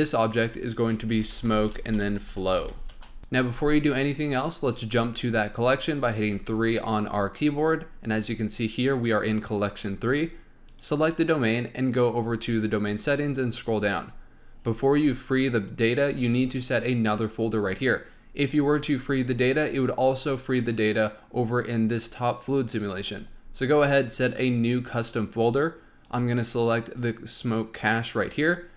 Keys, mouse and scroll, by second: 6.3 3, 10.6 click, 12.6-14.5 scroll down 19, 14.5-15.8 scroll up 11, 15.8-18.0 scroll down 9, 18.0-21.1 scroll up 4, 22.9-24.2 scroll down 11, 24.2 click.